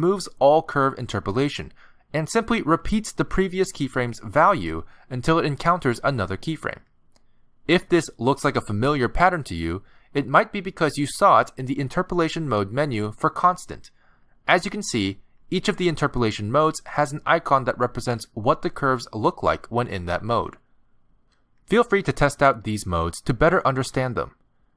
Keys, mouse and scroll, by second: 10.8 click, 23.0 click.